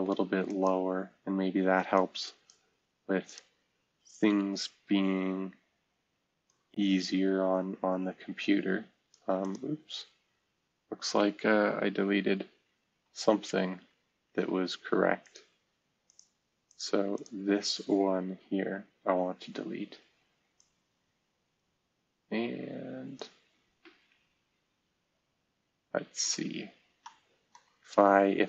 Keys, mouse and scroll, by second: 4.2 Delete, 10.0-10.5 scroll down 1, 10.5-11.1 scroll up 1, 12.0 ctrl+z, 13.7 ctrl+z, 18.2 Delete, 23.5-24.7 scroll up 1, 25.1-26.0 scroll down 1, 26.7 scroll down 1, 27.0 middle click.